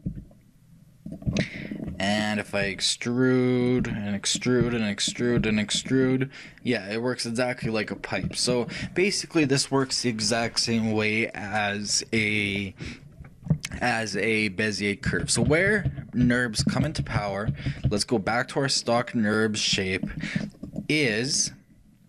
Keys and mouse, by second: 1.3 shift+right click, 1.4-4.0 middle drag, 2.7 e, 4.0 click, 4.7 e, 5.5 e, 6.2-8.4 drag, 8.6 click, 8.9-10.3 shift+drag, 10.3-11.5 shift+middle drag, 15.3-18.7 ctrl+z, 18.7-20.8 middle drag, 20.8-22.0 right drag.